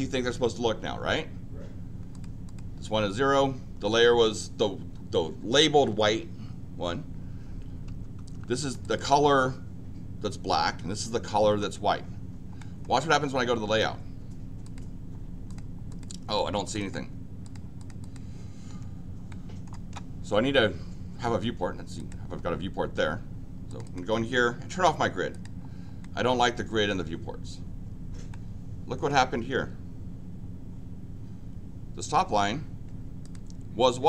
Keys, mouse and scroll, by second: 2.1 click, 2.4 click, 8.3 Escape, 8.6 click, 8.8 click, 11.5 Escape, 12.7 middle click, 14.6 click, 15.5 click, 15.9 click, 16.6 click, 16.8 click, 17.4 click, 17.8 click, 18.0 click, 19.3 middle click, 21.9 click, 23.7 click, 23.8 click, 25.3 click, 26.0-27.0 middle drag, 28.4 middle click, 33.2 click.